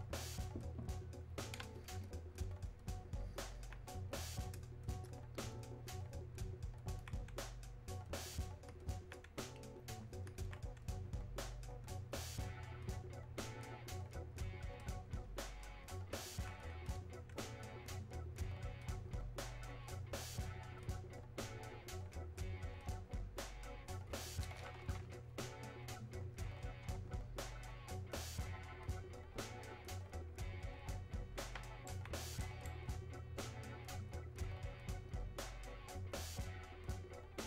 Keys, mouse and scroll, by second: 1.8 alt+click, 2.6-7.0 alt+drag, 7.0-25.9 alt+drag, 25.9-26.7 scroll down 1, 28.9 scroll up 1, 31.6 scroll up 1, 31.9-37.4 alt+right drag.